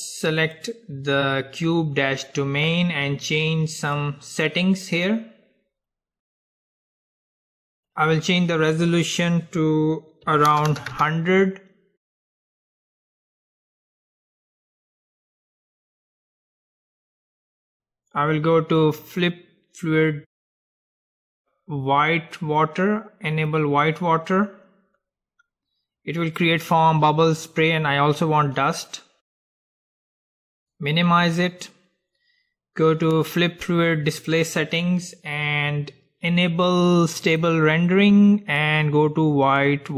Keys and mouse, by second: 0.5-2.5 drag, 4.1-6.1 drag, 7.9-10.9 drag, 10.9 KP_0, 14.6-18.3 middle drag, 21.4-25.6 drag, 24.1-26.6 middle drag, 28.7-33.6 drag, 34.3-36.3 drag, 34.9-37.4 middle drag, 37.4-39.5 drag.